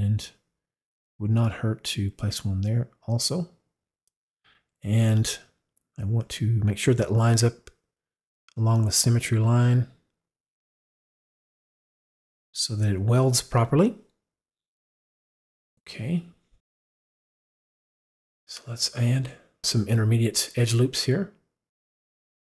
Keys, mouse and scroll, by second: 1.5-3.4 drag, 6.2 click, 8.0 click, 10.4 click, 12.3 click, 18.4 click.